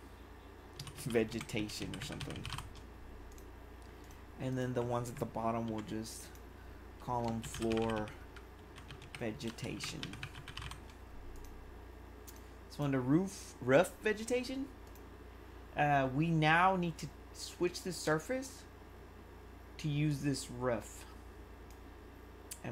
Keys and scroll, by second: 0.5-3.0 typing, 7.1-11.1 typing.